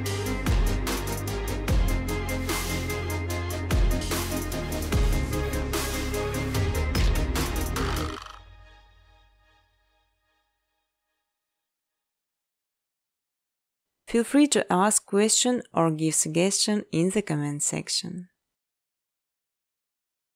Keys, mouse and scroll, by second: 0.5 click, 0.5-3.8 typing, 0.7-1.5 scroll, 1.5 click, 2.6 click, 4.0 click, 4.1 click, 5.3 click, 5.7-7.5 typing, 6.6 click, 7.0 click, 8.0 click, 8.6-9.7 typing, 9.2 click, 12.5 space, 14.6 space, 15.7 space, 17.4 click, 18.6 click, 19.2 click.